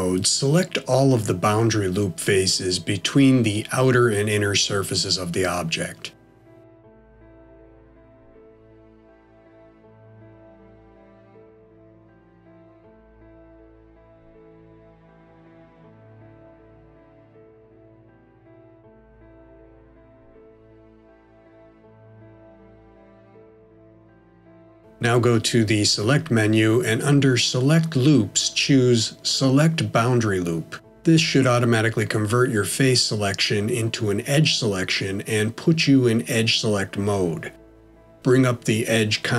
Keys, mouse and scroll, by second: 0.7 click, 2.0 alt+shift+click, 4.0 middle click, 5.6 alt+shift+click, 6.1 middle click, 7.2 alt+shift+click, 7.7 middle click, 8.4 middle click, 9.3 alt+shift+click, 12.0 middle click, 14.2 alt+shift+click, 15.7 middle click, 21.0 alt+shift+click, 21.6 middle click, 24.6 scroll down 1, 25.4 middle click, 31.0 click, 35.6 middle click, 38.1 right click.